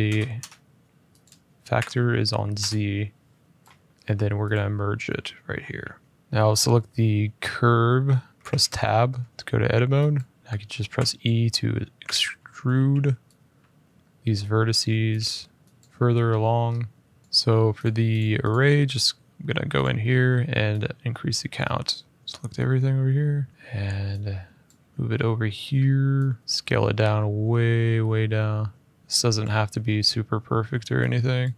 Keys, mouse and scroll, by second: 0.1 Return, 1.0 click, 1.5 typing, 2.3 Return, 4.5 click, 6.2 scroll, 8.3 Tab, 8.9 middle click, 9.9 click, 10.4 middle click, 10.7 e, 11.8 Escape, 12.5 g, 13.8 click, 14.0 middle click, 14.6 z, 14.9 click, 15.6 middle click, 16.4 middle click, 16.4 middle click, 17.2 click, 17.6 click, 17.9 click, 18.2 click, 19.6 click, 22.0 ctrl+z, 22.0 click, 23.5 middle click, 23.5 f, 24.4 click, 25.4 middle click, 26.4 click, 29.0 click, 30.2 middle click, 31.2 click.